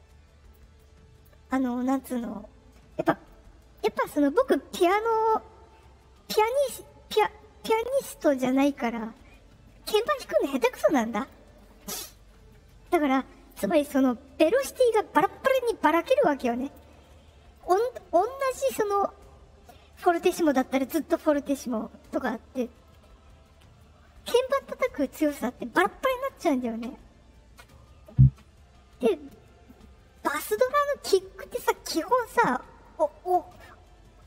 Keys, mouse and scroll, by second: 0.7 click.